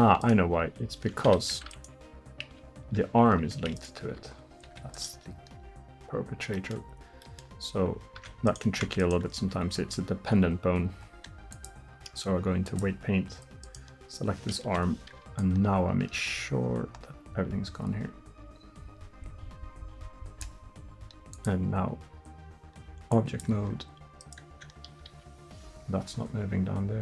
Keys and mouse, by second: 0.3-3.7 drag, 0.6 r, 2.5 r, 3.8-7.6 drag, 4.1 r, 8.2 Tab, 8.9 Tab, 12.4-17.9 drag, 14.7 KP_1, 24.3-27.0 drag, 25.2 r.